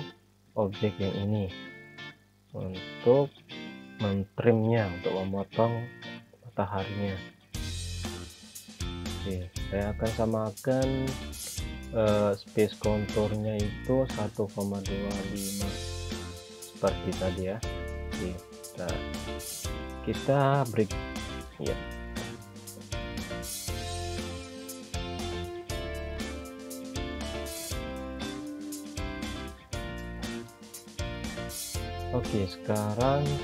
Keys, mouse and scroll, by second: 1.4 scroll up 1, 4.0 click, 12.4 click, 14.0-15.2 typing, 15.8 Return, 18.8 click, 26.4 click, 31.6 click.